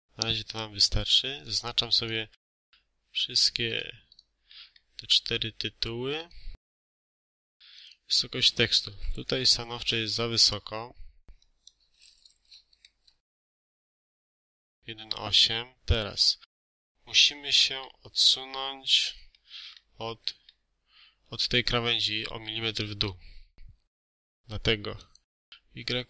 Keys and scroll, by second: 8.8 1, 9.3 8, 9.7 Return, 12.3 1, 12.9 8, 13.2 Return.